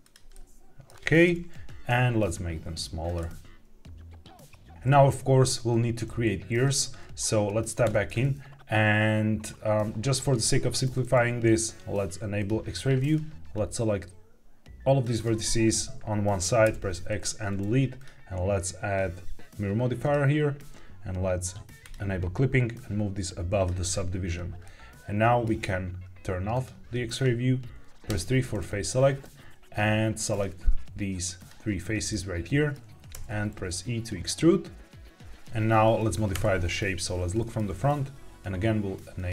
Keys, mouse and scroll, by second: 0.2-0.8 middle drag, 1.2 KP_1, 1.8 s, 3.1 click, 3.1 g, 7.7 Tab, 12.3 click, 13.0-14.9 drag, 16.6 x, 17.9-20.0 drag, 21.7 click, 22.6-23.5 drag, 24.6 middle click, 26.4 click, 28.0 3, 30.2 click, 31.3 ctrl+click, 32.0 middle click, 33.1 e, 35.2 click, 36.2 KP_1, 37.3 shift+middle click, 39.1 click.